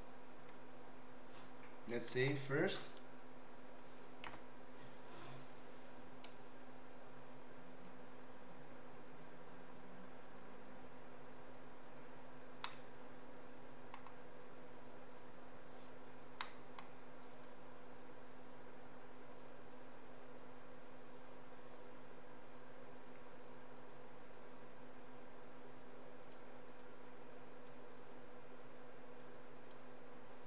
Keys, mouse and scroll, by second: 2.1 ctrl+s, 5.2 F12, 12.6-14.0 middle drag, 16.4 middle click.